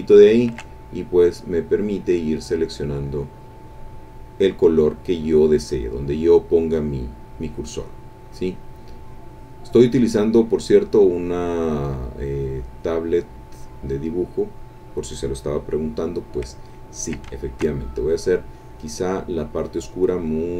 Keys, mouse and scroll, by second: 0.3 ctrl+click, 0.9-11.9 ctrl+drag, 12.0-15.2 drag, 16.9 ctrl+click, 17.4 ctrl+shift+click, 17.9-19.1 shift+drag.